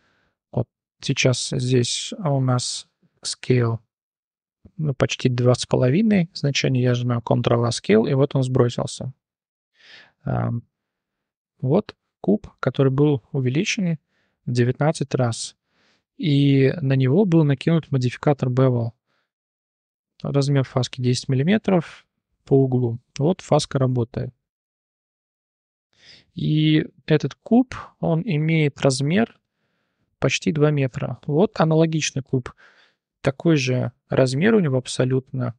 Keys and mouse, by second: 0.7 click, 5.3 shift+middle drag, 6.9 ctrl+a, 9.4 ctrl+z, 9.9 shift+drag, 10.9 click, 11.4 shift+drag, 12.0 click, 12.6 shift+drag, 16.7 click, 23.1 click, 23.8 middle click, 24.7 middle click, 24.9-26.0 middle drag, 26.2 shift+middle drag, 28.0 click, 28.5 shift+drag, 31.0 shift+drag.